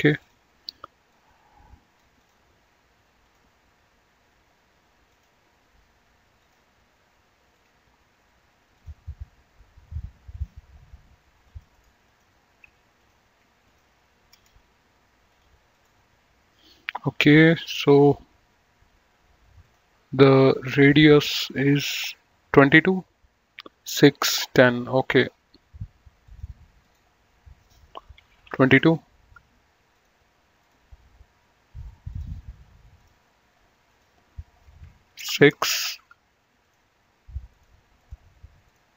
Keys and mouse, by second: 5.1 click, 6.3 click, 8.7 click, 10.1 click, 11.4 click, 11.7 right click, 12.0 click, 13.6 ctrl+click, 15.2 click, 19.6 click, 21.2 click, 25.1 click, 26.2 click, 28.2 KP_2, 28.6 Return, 29.9 click, 32.0 click, 35.1 KP_6, 35.3 Return, 36.4 click.